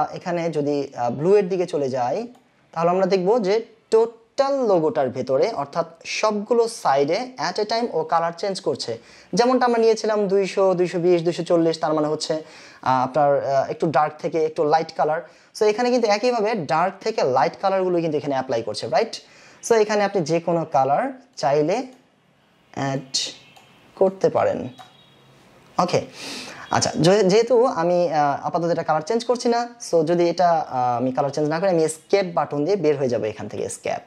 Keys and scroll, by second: 33.4 Escape.